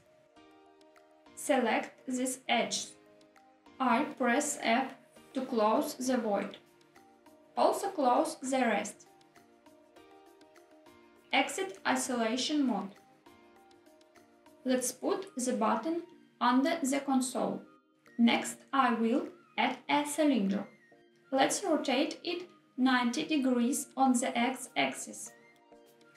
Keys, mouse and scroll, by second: 0.0 x, 0.2 middle click, 0.4 alt+z, 1.5 2, 2.0 click, 3.4 shift+click, 6.3 f, 7.5 click, 7.6 middle click, 8.1 shift+click, 8.5 f, 8.6 middle click, 9.0 middle click, 9.3 shift+click, 9.5 f, 9.7 middle click, 10.0 middle click, 10.3 shift+click, 10.5 f, 10.7 middle click, 10.9 click, 11.6 Tab, 13.7-15.6 typing, 15.2 middle click, 15.5 click, 16.6 click, 17.0 s, 17.2 click, 17.3 g, 17.8 click, 18.2 shift+a, 22.1 r, 22.8 x, 23.5 9, 23.8 0, 24.8 click, 25.9 s.